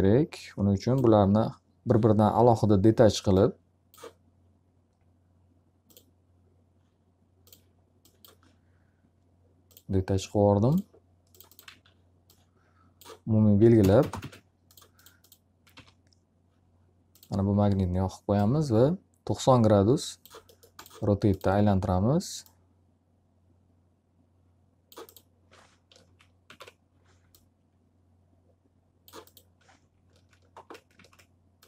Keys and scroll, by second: 11.2 alt+a, 13.7 ctrl+space, 15.6 e, 25.5 ctrl+z.